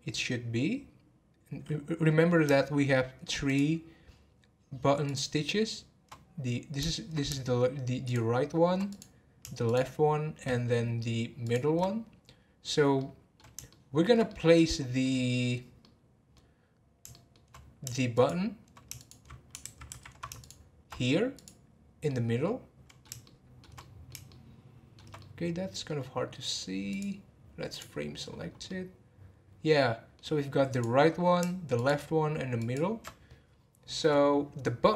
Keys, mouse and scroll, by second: 3.4 shift+click, 5.0 shift+click, 8.0 shift+click, 8.9 click, 9.7 shift+click, 11.4 shift+click, 13.0-15.4 middle drag, 15.4-15.8 scroll down 2, 15.8 middle click, 16.7-17.1 scroll up 1, 17.1 shift+middle click, 17.5-18.1 scroll up 1, 18.1 shift+click, 19.0 shift+click, 20.4 shift+click, 21.3 click, 22.0-26.9 middle drag, 26.9-28.3 drag, 28.3 scroll down 4, 28.6-30.7 middle drag, 30.7 click, 31.7 shift+click, 32.6 shift+click.